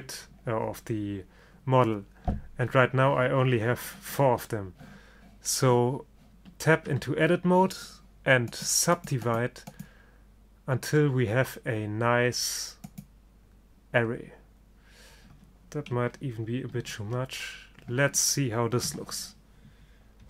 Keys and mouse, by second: 6.5 Tab, 7.0 Tab, 8.6-10.4 drag, 11.8-12.9 middle drag, 14.9 middle click, 16.8 ctrl+z, 19.0 Tab.